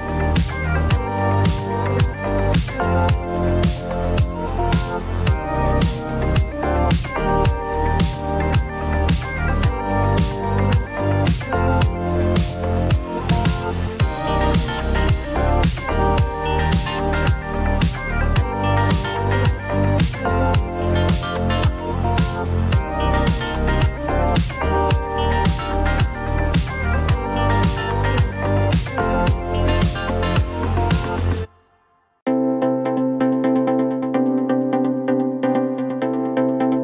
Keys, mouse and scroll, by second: 0.0-0.1 typing, 0.4 Return, 2.4 click, 3.3 s, 4.2 click, 4.4-6.0 typing, 6.8 click, 9.0 click, 10.5-11.6 typing, 12.8 click, 15.7 click, 17.1 click, 21.1 shift+click, 22.1 click, 22.9 click, 23.4 click, 23.8 click, 24.9 click, 31.0 click, 33.9 click, 34.7 click.